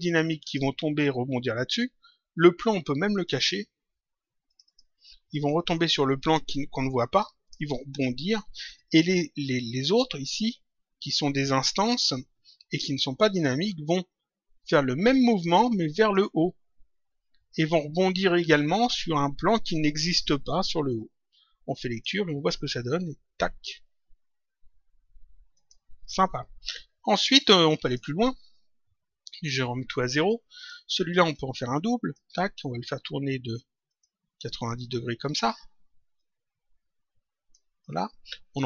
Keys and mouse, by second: 3.1 click, 4.4 click, 9.8 click, 11.7 click, 13.2 click, 15.5 click, 21.9 click, 25.5 click, 27.7 click, 29.3 click, 30.5 click, 31.3 ctrl+click, 33.8 click, 35.2 click.